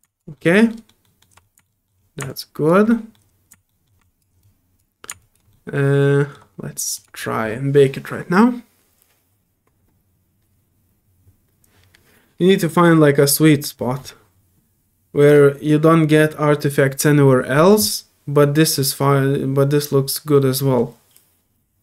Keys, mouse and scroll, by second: 0.0 alt+click, 0.7 alt+middle click, 1.0 alt+middle click, 1.6 alt+middle click, 2.2 alt+middle click, 2.3 alt+click, 2.9 alt+middle click, 3.7 alt+middle click, 4.0 alt+click, 4.4 alt+click, 5.2 alt+click, 5.5 alt+middle click, 6.9 alt+click.